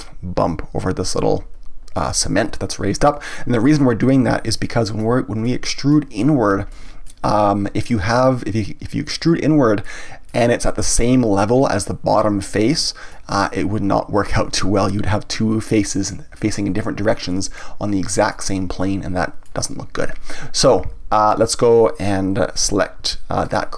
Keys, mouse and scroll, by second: 3.0 middle click, 4.0 scroll up 1, 4.2-4.6 scroll down 1, 4.6-9.7 shift+middle drag, 9.8-15.8 middle drag, 17.3-21.8 middle drag, 23.4 click.